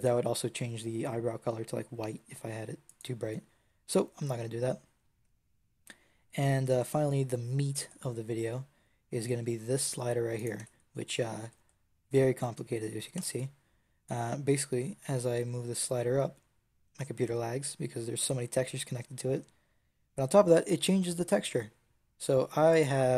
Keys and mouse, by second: 3.3-4.7 drag, 6.9-10.5 drag, 10.5 Tab, 13.0 Tab, 22.6-23.1 drag.